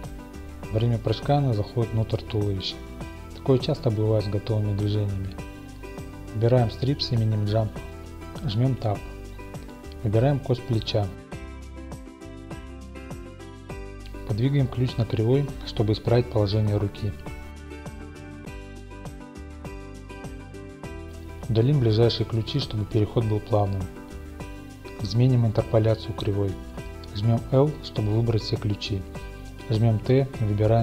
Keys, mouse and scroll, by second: 0.0-1.4 middle drag, 1.2-2.1 typing, 1.9 click, 2.1-4.5 middle drag, 3.2 typing, 6.3 click, 7.4 click, 9.5 Tab, 10.3-10.7 scroll, 10.7-11.8 drag, 12.8 Home, 13.4 click, 14.7 click, 15.7 middle click, 16.1 middle click, 16.6-19.7 drag, 18.7 g, 19.0 y, 20.1-21.1 drag, 21.1-23.4 middle drag, 23.4-27.2 drag, 24.9 x, 27.7-30.8 drag, 29.0 i.